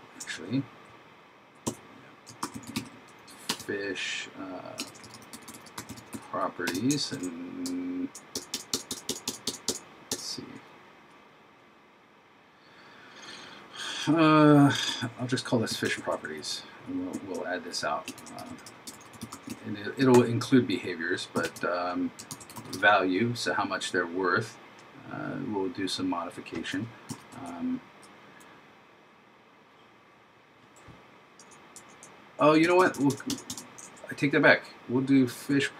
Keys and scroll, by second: 2.5 shift+f, 4.9 shift+p, 7.2 shift+9, 16.0 shift+Right, 18.2 shift+p, 20.2 super+Right, 22.4 shift+v.